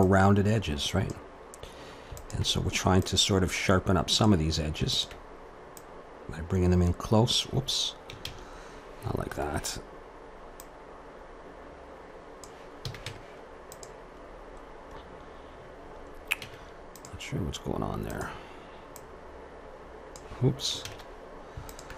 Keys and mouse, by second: 2.2-4.8 drag, 6.5 click, 7.4 click, 10.6-12.8 drag, 12.8 a, 13.1 Tab, 16.0-18.1 middle drag, 17.1 Tab, 18.1-19.8 drag, 19.9 click, 20.9 ctrl+z, 21.7-21.9 drag.